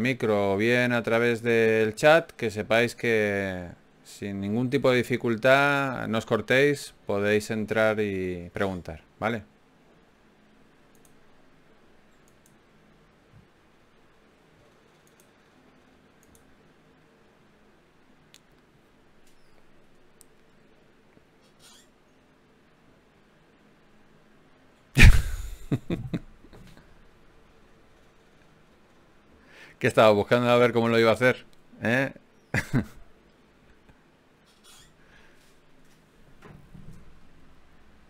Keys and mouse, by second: 0.5-2.0 drag, 1.3 f, 2.6 ctrl+z, 4.6 KP_Divide, 5.8 KP_1, 10.2 ctrl+r, 18.3 right click, 19.2-20.4 drag, 20.4 e, 23.0 g, 26.8 w, 31.0-32.7 middle drag, 34.7 s, 37.6 g.